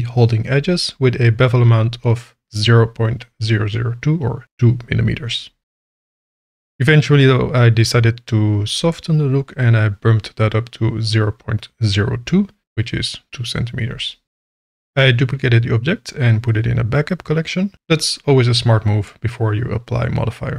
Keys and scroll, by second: 0.2 Tab, 1.2 alt+a, 4.9 Tab, 5.5 g, 6.1 Tab, 8.0 KP_0, 8.3 KP_Decimal, 8.5 KP_1, 8.8 KP_Enter, 10.1 KP_0, 10.3 KP_Decimal, 10.5 KP_2, 10.9 KP_Enter, 14.5 m, 16.0-16.6 typing.